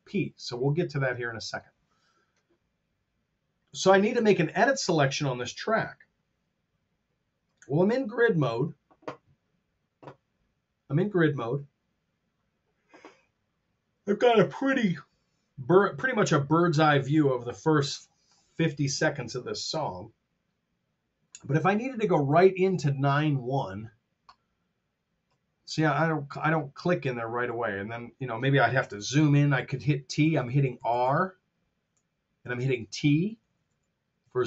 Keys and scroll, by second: 29.0 t, 30.1 r, 32.4 t, 34.2 r.